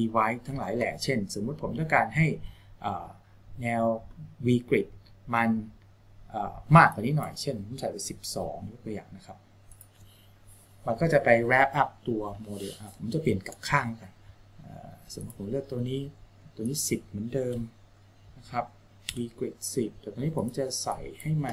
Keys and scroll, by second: 8.3 KP_2, 17.9 KP_1, 19.4 KP_0.